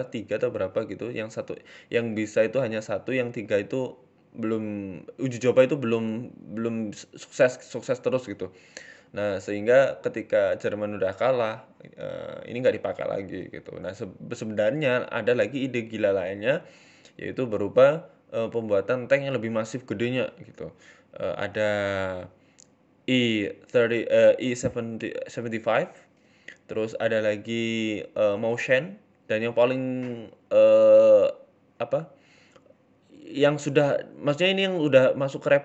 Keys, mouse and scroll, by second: 0.3 KP_3, 1.1-1.9 scroll up 2, 1.5 g, 3.2 middle click, 3.4 scroll down 6, 3.6 middle click, 4.1 middle click, 4.3 middle click, 5.0 KP_1, 5.3-5.7 scroll up 8, 5.7 shift+middle click, 6.1 click, 7.0 g, 8.3 click, 8.8 g, 9.9-10.5 scroll down 6, 10.1 middle click, 10.5 middle click, 11.5 shift+middle click, 11.8 middle click, 13.6 right click, 13.8 shift+middle click, 14.3 middle click, 15.0 shift+right click, 15.3 ctrl+z, 15.7 alt+shift+right click, 16.5 KP_3, 17.2 scroll up 6, 17.5 shift+middle click, 18.1 g, 19.5 scroll down 4, 19.5 g, 19.8 scroll up 1, 21.1 scroll down 2, 21.3 middle click, 21.3 scroll up 2, 21.5 Tab, 21.6 scroll down 2, 21.7 middle click, 22.7 shift+middle click, 22.9 middle click, 23.7 middle click, 24.1 shift+middle click, 24.5 KP_1, 24.9 shift+middle click, 26.4 scroll up 2, 26.7 shift+middle click, 27.0-28.1 scroll up 3, 27.3 shift+middle click, 28.9-29.3 scroll down 6, 29.3 shift+middle click, 30.2 shift+middle click, 30.2 scroll up 2.